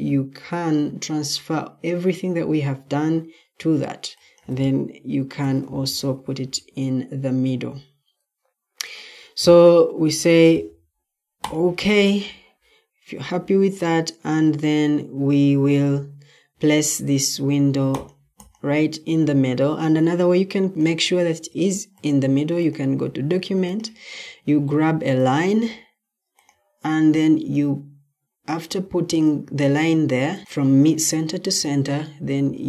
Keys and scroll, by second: 5.0-5.9 typing.